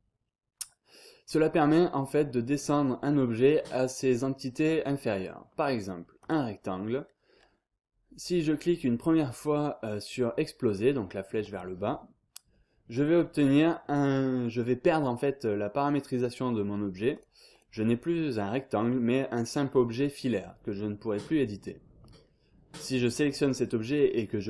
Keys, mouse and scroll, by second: 0.1-0.6 scroll up 1, 0.9 scroll down 1, 1.1-2.1 scroll up 1, 2.1-2.6 scroll down 1, 2.6-3.2 scroll up 1, 4.9 scroll down 1, 5.1-5.7 scroll up 1, 6.2 click, 11.4 click, 12.9 click, 14.1 scroll down 1, 14.2-14.8 scroll up 1, 17.1 click, 21.3 scroll down 1, 21.5-22.1 scroll up 1, 22.8 click.